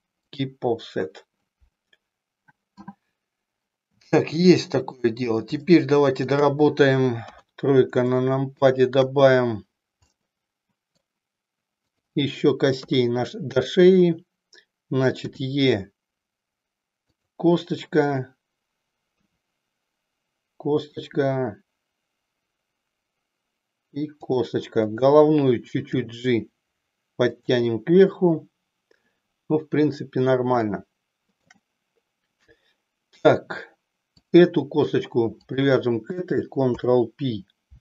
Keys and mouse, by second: 4.2 shift+middle click, 5.7 shift+middle click, 7.4 KP_3, 8.1 shift+middle click, 10.1-11.2 middle drag, 12.1 click, 12.8 KP_3, 15.3 e, 17.2 click, 21.0 click, 21.1 e, 24.8 click, 26.1 g, 30.7 shift+middle click, 35.4 shift+click, 36.9 ctrl+p.